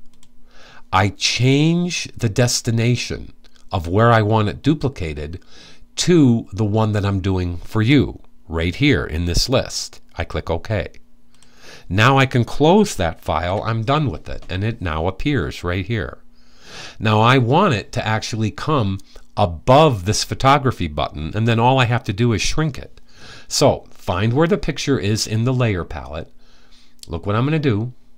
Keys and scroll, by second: 12.9 super+w.